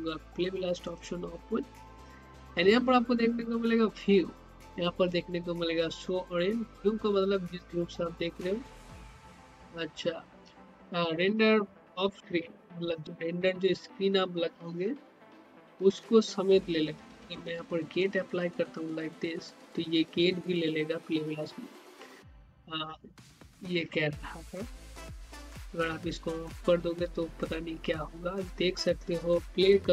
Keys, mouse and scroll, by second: 0.8 click, 9.6 scroll up 1, 18.0 click, 25.1 click.